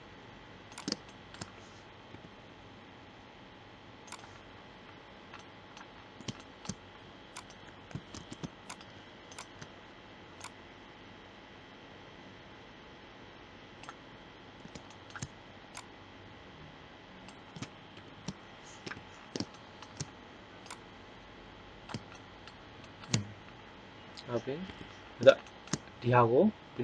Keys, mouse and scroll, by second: 0.7-2.4 drag, 2.1 g, 7.3-8.5 right drag, 8.1 ctrl+Tab, 15.7-17.9 drag, 17.9 ctrl+l, 18.7 KP_3, 19.1-20.4 middle drag, 20.6-22.2 drag, 24.6 KP_1.